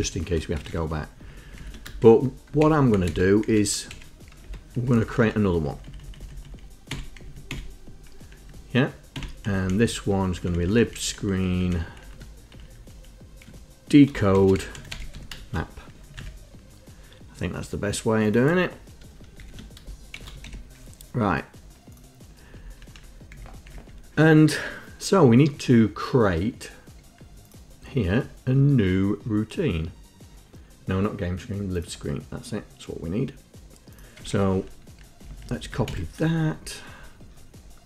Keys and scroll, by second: 0.0 Left, 0.1 l, 0.4 Up, 0.8 Home, 0.9 Home, 1.5 shift+Down, 1.6 shift+Down, 1.8 shift+Down, 2.8 ctrl+Insert, 3.1 Down, 3.2 Up, 3.7 Down, 4.1 shift+Insert, 4.6 Return, 5.0 Up, 5.3 Up, 5.6 Right, 5.9 Right, 6.0 Right, 6.3 Right, 6.6 Right, 7.1 Delete, 7.4 Down, 7.7 Delete, 8.6 Down, 9.7 Right, 9.9 Right, 10.0 Right, 10.2 Right, 10.4 Right, 10.9 Right, 11.1 Right, 11.2 Right, 11.3 Right, 11.5 Right, 11.6 Right, 11.8 Right, 12.2 Left, 12.7 shift+Right, 14.3-15.8 typing, 16.2 Down, 19.6 shift+End, 20.1-21.1 typing, 22.9 Up, 23.1 Up, 23.4 Down, 23.8 Down, 34.3 Home, 35.4 shift+Down, 35.6 shift+Down, 36.0 ctrl+Insert.